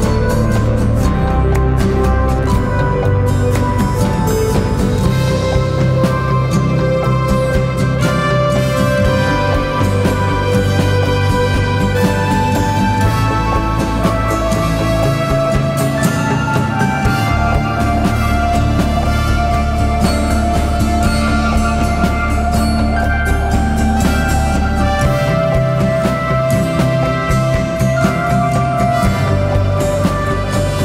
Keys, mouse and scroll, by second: 3.3-10.2 alt+shift+drag, 10.2 right click, 11.6 click, 17.6 shift+r, 21.2-23.7 typing, 25.2 click, 28.2 click, 28.2 click.